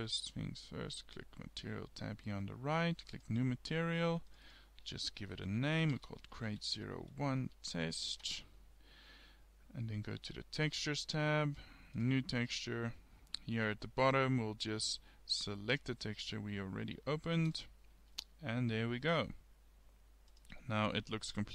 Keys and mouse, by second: 3.2-6.4 drag, 10.6-13.2 drag, 20.6-21.5 middle drag.